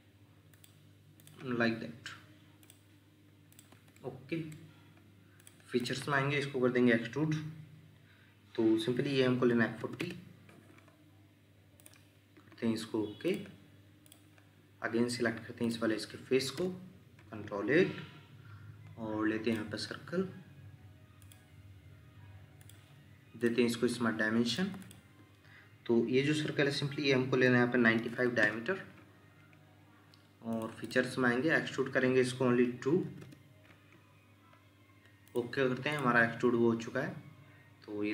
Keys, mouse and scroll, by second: 3.7 Escape, 3.9 middle click, 5.8 double click, 9.5-10.0 typing, 10.0 Return, 16.5 ctrl+8, 24.8 double click, 28.0 typing, 28.4 Return, 30.8 double click, 33.0 typing, 33.2 Return.